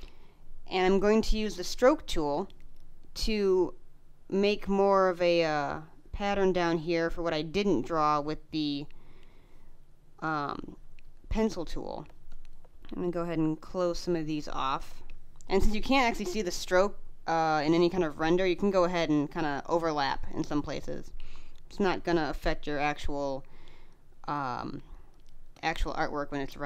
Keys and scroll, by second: 2.0 space, 11.9 space, 14.7 space, 19.8 space, 22.9 space.